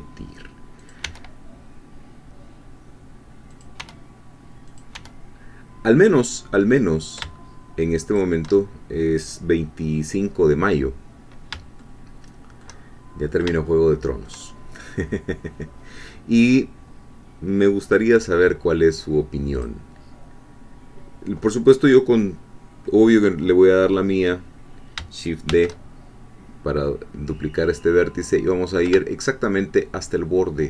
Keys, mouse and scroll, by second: 0.8 click, 1.0 e, 3.5 click, 3.8 e, 4.7 click, 5.0 e, 8.1 shift+click, 11.8-12.8 shift+middle drag, 13.2 scroll up 1, 13.7-14.8 shift+middle drag, 19.5 click, 25.5 shift+d.